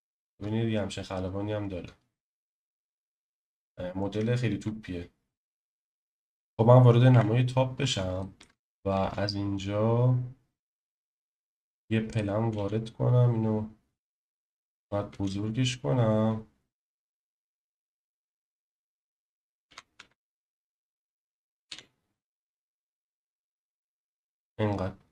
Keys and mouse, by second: 0.0 shift+middle click, 7.1 KP_7, 8.2 shift+middle click, 8.9 shift+a, 12.5 s, 14.7 middle click, 15.1 s, 17.2 x, 19.0 click, 19.6 s, 20.0 x, 21.7 y.